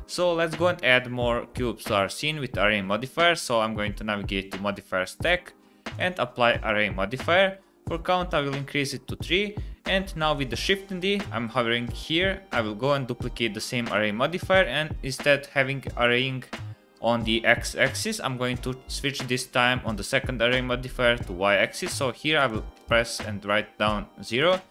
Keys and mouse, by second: 0.5 click, 3.4-6.0 drag, 8.9 click, 10.3 click, 12.6 shift+d, 21.8 click, 23.0 click.